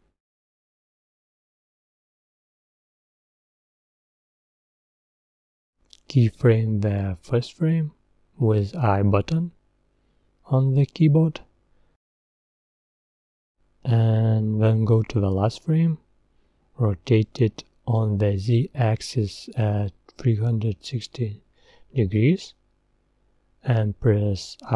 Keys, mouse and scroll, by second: 2.3-8.8 drag, 9.0 click, 9.1 i, 14.0-17.6 drag, 17.6 r.